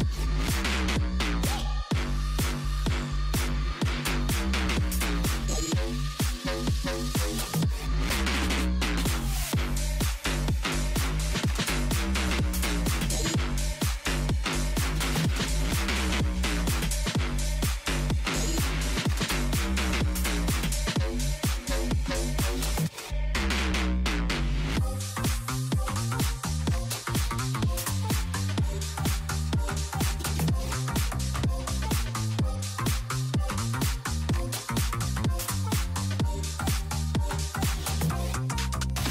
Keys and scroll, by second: 13.7-15.6 typing, 23.5 shift+m, 25.4 a, 25.9 r, 26.9 a, 28.3-29.7 typing.